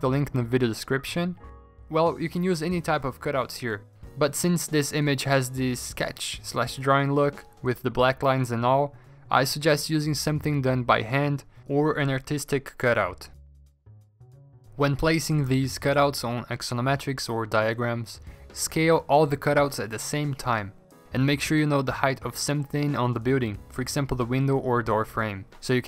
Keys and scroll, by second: 1.2 alt+Tab, 1.8-2.5 Return, 3.6 ctrl+g, 3.8 ctrl+t, 5.3 Return, 5.4 v, 7.5 ctrl+t, 8.8 Return, 11.8 ctrl+t, 13.6 v, 14.4 ctrl+t, 16.4 v, 17.8 ctrl+t, 18.1 alt+Tab, 18.3 ctrl+t, 19.5 v.